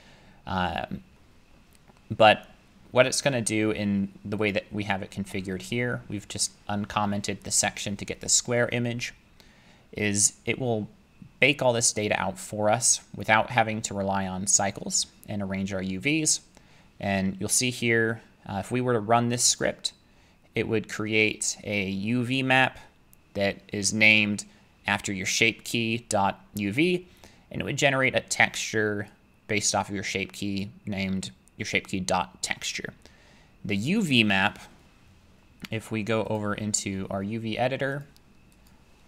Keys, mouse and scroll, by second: 4.5 click, 26.8-35.7 drag, 36.4-38.0 drag, 38.7 click.